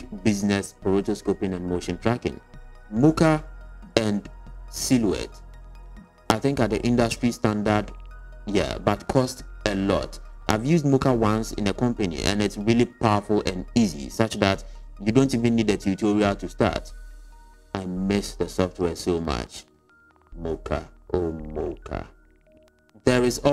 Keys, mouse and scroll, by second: 0.4 middle click, 1.0 s, 2.0 middle click, 2.2 s.